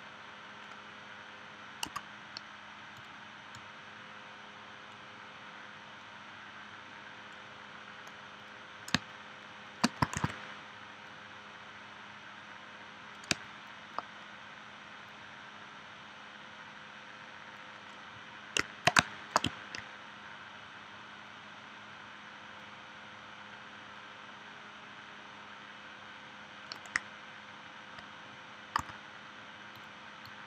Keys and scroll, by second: 1.9 a, 9.0 space, 10.2 shift+c, 13.3 space, 19.0 space, 28.8 a.